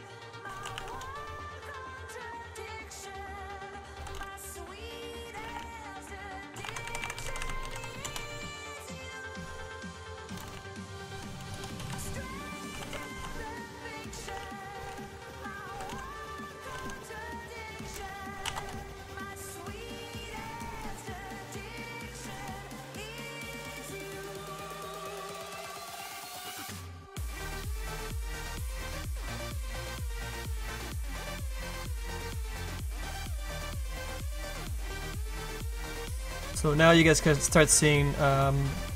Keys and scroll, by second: 0.0-1.2 typing, 3.6-8.0 typing, 9.1-17.7 typing, 18.4 Return.